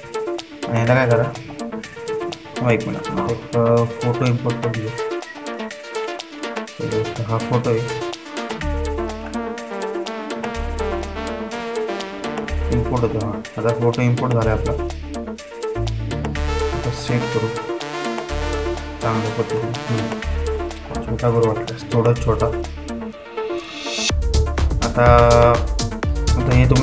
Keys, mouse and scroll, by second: 0.0 typing, 1.9 typing, 5.7-13.1 drag, 15.1-22.4 drag, 22.4 ctrl+t, 23.3-26.2 drag.